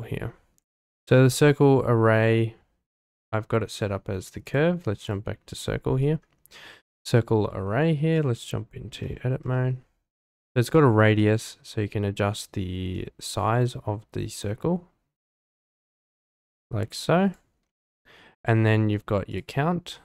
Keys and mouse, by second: 1.0-1.9 middle drag, 4.4-5.3 drag, 8.6-9.0 drag, 9.0 middle click, 11.2-17.5 drag, 19.3 click.